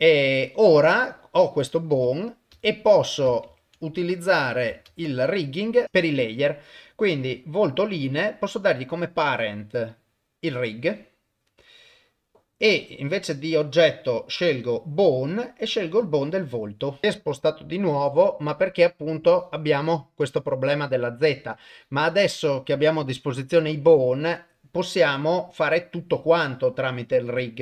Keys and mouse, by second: 0.3 click, 1.1-3.3 drag, 1.9 F2, 3.5 ctrl+Tab, 4.5 click, 4.9 ctrl+s, 8.5-11.2 drag, 12.4 middle click, 13.1-17.0 drag.